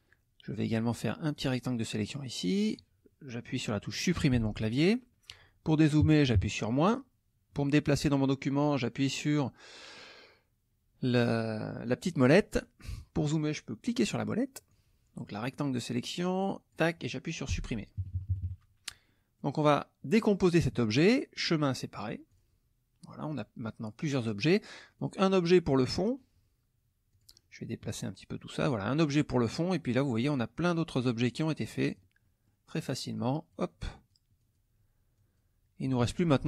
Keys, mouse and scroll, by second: 1.3-2.9 drag, 4.3 Delete, 6.0 KP_Subtract, 9.9-11.5 middle drag, 12.6 middle click, 13.8 middle click, 14.7-16.9 drag, 17.5 Delete, 18.0 KP_Subtract, 19.1 middle click, 21.4 click, 22.3 click, 24.4 click, 25.0 click, 27.1 click, 27.9 click, 28.4 click, 29.5 click, 30.3 click, 31.1 click, 31.8 click, 32.2 middle click, 33.1 click, 33.9 click, 34.4 click, 35.1 click, 36.0 ctrl+z.